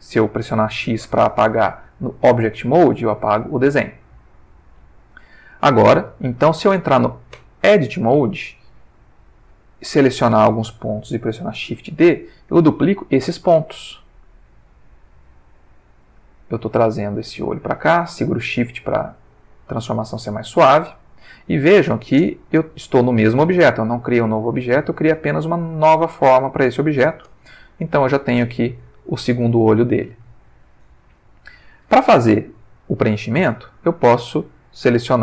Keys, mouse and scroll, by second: 3.3 x, 3.7 click, 4.9 click, 7.3 Tab, 9.2-10.1 drag, 12.0 shift+d, 20.9 shift+click, 24.7 ctrl+middle click, 26.5 ctrl+middle click, 27.3 ctrl+Tab, 27.9 ctrl+middle click, 29.0-30.3 ctrl+middle drag, 30.4 ctrl+shift+middle click, 31.2 ctrl+shift+middle click.